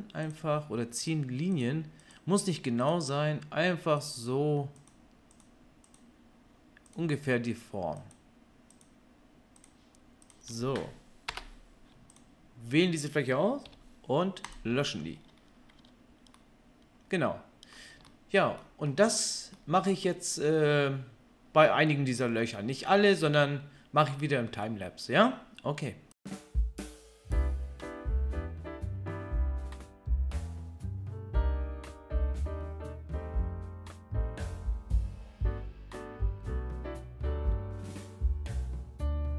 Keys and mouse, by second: 12.2-37.4 middle drag, 13.6 Delete, 15.8 Tab, 27.1 KP_3, 28.1 Tab, 28.7 k, 31.2 Delete, 34.2 k, 39.1 click.